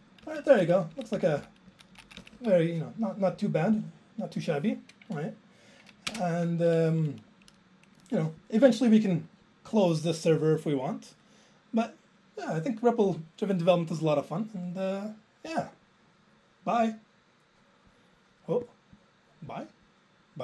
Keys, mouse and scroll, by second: 0.3 Left, 0.5 Right, 2.3 Up, 2.3 Down, 2.5 Down, 3.8 click, 7.1 alt+space, 7.5 Up, 9.3 click, 9.3 click, 9.8 click.